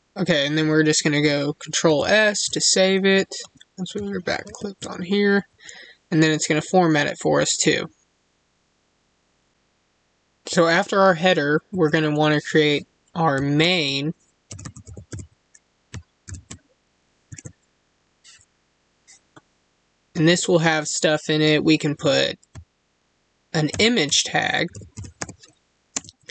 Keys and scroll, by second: 1.8 ctrl+s, 4.4 ctrl+s, 25.9 space.